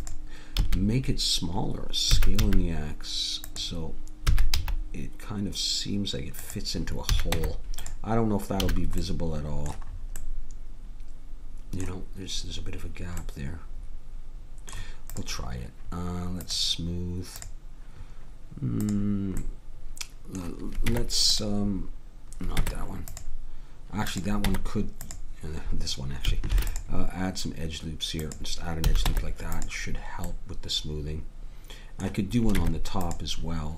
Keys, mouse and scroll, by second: 0.6 a, 2.1 s, 4.2 s, 7.1 a, 7.3 Tab, 8.6 a, 13.2 middle click, 15.1-20.0 drag, 19.4-20.9 middle drag, 20.9 Tab, 22.5 Tab, 24.4 Tab, 26.5 ctrl+r, 28.8 a, 29.1 Tab, 32.5 Tab.